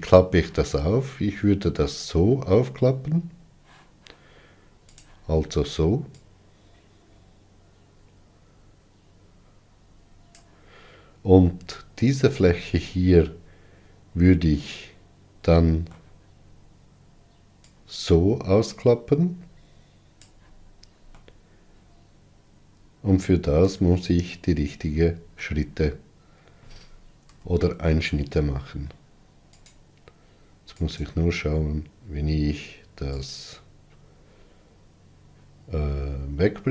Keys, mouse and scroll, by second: 5.2 click, 6.3-9.4 drag, 15.0-17.9 middle drag, 17.9-21.4 drag, 21.4-24.5 middle drag, 27.5 n.